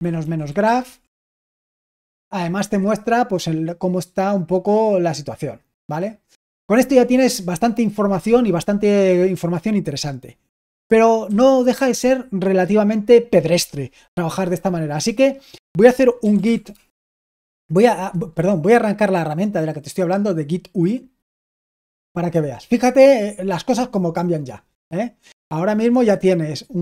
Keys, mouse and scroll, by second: 0.0-2.0 typing, 11.2 typing, 15.9-17.3 typing, 21.0-21.8 typing.